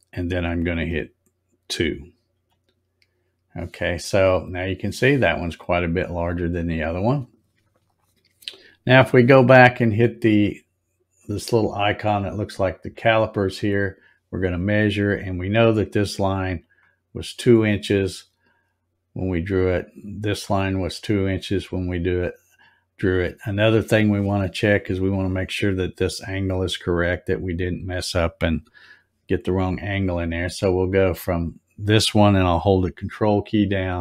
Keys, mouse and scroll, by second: 6.2 click, 13.7 click, 16.6 click, 20.3 click, 22.6-23.5 scroll up 9, 24.2 scroll up 2, 26.3 scroll up 4, 26.8 scroll up 2, 27.6 scroll up 1, 31.3 click.